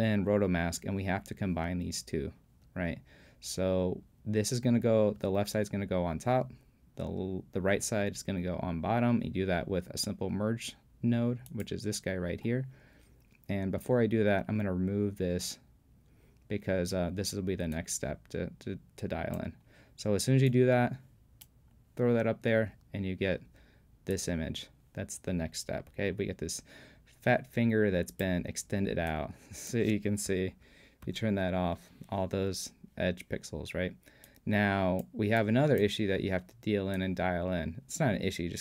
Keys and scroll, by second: 30.5 super+p.